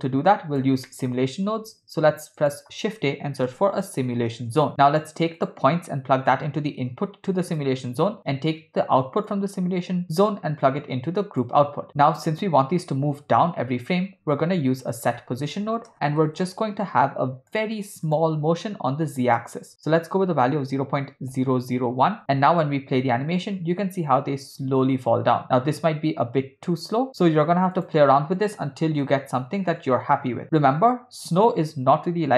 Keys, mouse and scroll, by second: 0.9 middle click, 1.6 shift+a, 6.3-7.7 drag, 9.3-11.5 drag, 12.1 click, 14.1 shift+a, 19.2-22.2 drag, 23.0 space, 27.1-29.8 drag, 27.1 space, 31.3 click, 32.0 space.